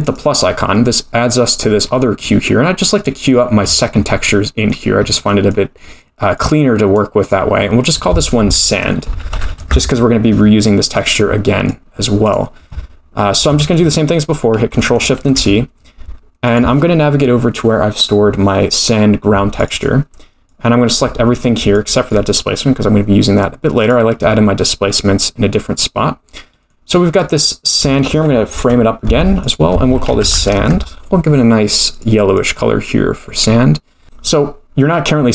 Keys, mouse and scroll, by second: 1.6-2.5 scroll down 5, 2.2 middle click, 2.9 click, 3.7-4.3 scroll up 11, 4.3 middle click, 5.0-5.5 scroll up 2, 5.3 middle click, 6.4 click, 7.2 click, 7.8-10.3 drag, 11.7-13.8 drag, 15.2 ctrl+shift+t, 25.5 middle click, 26.0-26.7 scroll down 3, 26.5 middle click, 27.1-27.8 drag, 28.5 ctrl+j, 29.4-31.3 drag, 31.9-32.4 drag, 34.0 middle click, 34.0 scroll down 3.